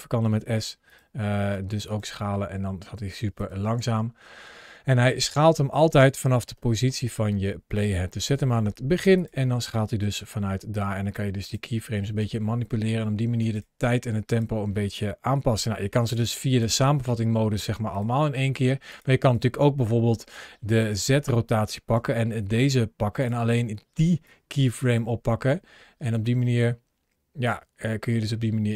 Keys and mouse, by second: 0.1 s, 0.7 right click, 1.3 click, 2.0 s, 3.2 click, 3.4 space, 5.7 space, 6.3 ctrl+shift+a, 9.0 click, 9.8 s, 11.2 click, 11.8 space, 13.2 space, 13.4 click, 13.7 click, 15.0 g, 15.9 click, 16.3 click, 16.6 g, 17.3 click, 18.7 click, 20.6 click, 21.8 g, 23.0 click, 24.0-24.6 drag, 24.6 space.